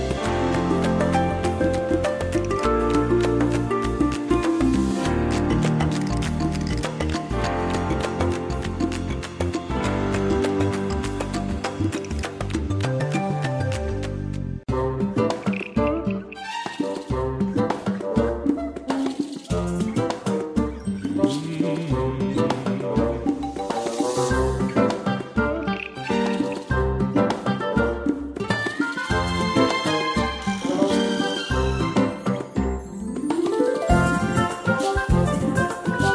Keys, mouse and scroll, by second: 14.6-14.9 ctrl+scroll up 1, 15.3 ctrl+scroll up 1, 18.1 click, 33.5 ctrl+z, 34.1 click.